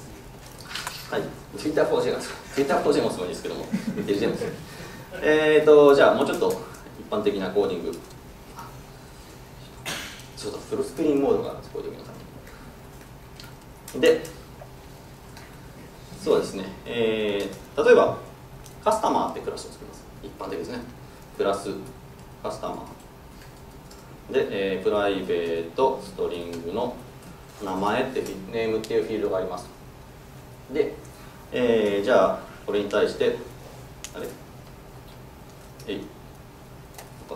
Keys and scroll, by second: 7.5 ctrl+shift+super+F12, 11.4 ctrl+super+f, 13.9 ctrl+Down, 31.9 alt+Return, 35.8 alt+super+Return.